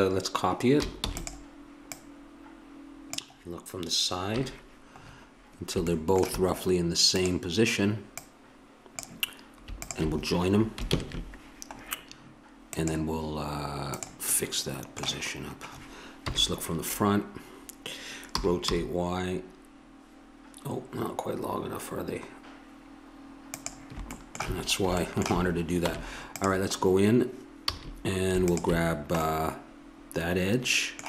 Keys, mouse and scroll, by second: 1.0 shift+d, 1.9-4.1 drag, 4.3 KP_3, 5.0 middle click, 5.2 middle click, 7.2 right click, 7.9-11.6 drag, 10.9 ctrl+j, 12.7-14.4 drag, 16.3 KP_1, 18.3 r, 24.1-25.8 middle drag, 25.8 Tab, 27.7 a, 28.4-30.2 drag.